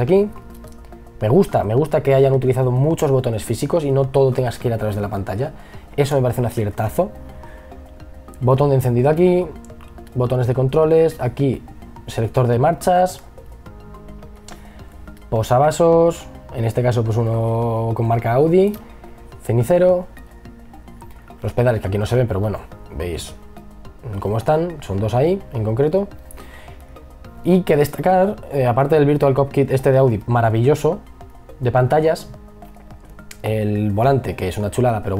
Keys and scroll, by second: 5.7 e, 6.6 b.